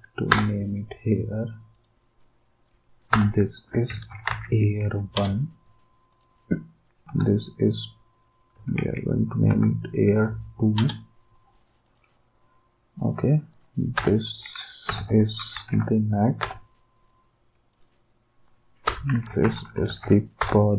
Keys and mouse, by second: 0.3 Return, 3.1 Return, 3.5-4.6 typing, 6.1 d, 7.0 Return, 8.3-10.1 typing, 10.8 Return, 11.8 d, 13.9 Return, 14.6-16.2 typing, 16.4 Return, 18.9 Return, 19.0-20.5 typing.